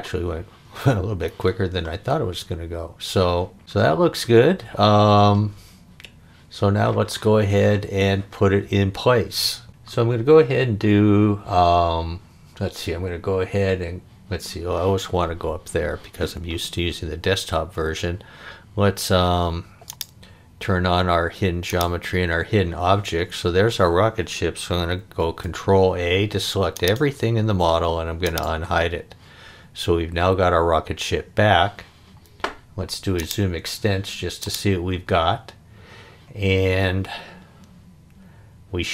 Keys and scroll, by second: 25.1 super+a.